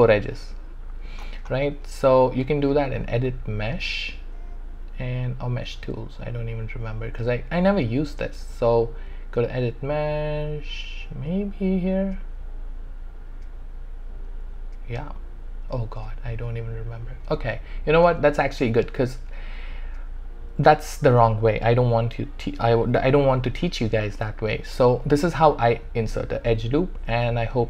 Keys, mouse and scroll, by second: 2.8 click, 18.6 click, 21.7 click, 22.2 alt+click.